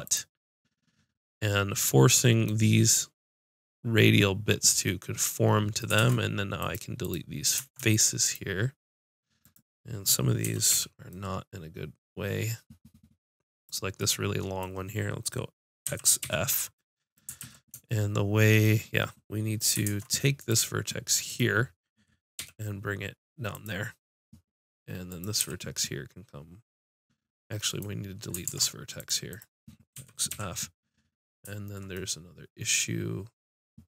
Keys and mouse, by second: 6.0 ctrl+Tab, 7.0-8.3 drag, 10.4 x, 10.7 click, 12.3 middle click, 13.6-15.3 drag, 15.9 x, 17.4 ctrl+z, 19.9 ctrl+Tab, 22.4 g, 25.1-28.5 drag, 25.4 g, 28.5 ctrl+Tab, 29.9 x.